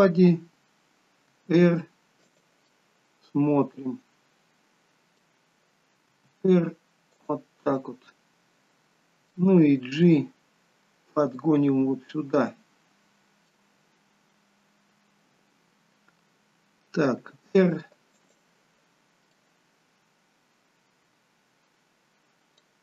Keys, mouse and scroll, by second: 1.4 r, 2.7 middle click, 7.8 middle click, 7.8 r, 10.1 g, 12.2 middle click, 19.4 middle click, 19.4 r.